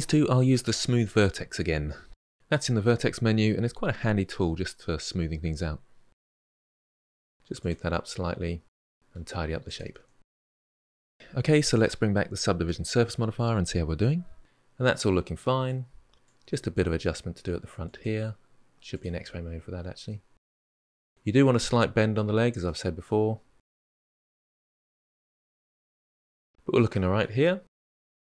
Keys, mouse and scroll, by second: 1.9-4.2 drag, 4.2-6.4 middle drag, 6.4 click, 6.5 g, 7.1 middle click, 7.8 click, 7.9-10.1 typing, 8.3 click, 8.7 click, 9.3 middle click, 10.0 click, 10.4-11.6 middle drag, 11.6 click, 11.9-13.4 middle drag, 16.0 click, 16.4 g, 17.8 click, 18.5 middle click, 19.2 click, 19.9 middle click, 20.3 g, 22.4-23.4 middle drag, 23.4 click, 23.7 g, 24.1 click, 24.3 click, 24.5 scroll up 1, 24.5 middle click, 24.7 click, 25.0 g, 25.4 middle click, 26.7-27.8 middle drag, 27.8 click.